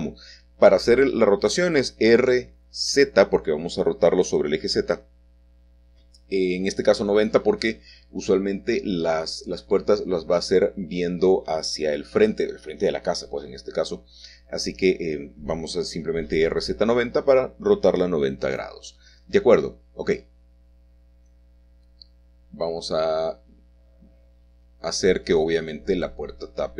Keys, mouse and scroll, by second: 0.3 shift+middle click, 3.3 g, 4.5 y, 6.5 click, 8.1 s, 10.3 click, 11.7 g, 18.1-19.1 shift+drag, 24.6-25.7 shift+drag.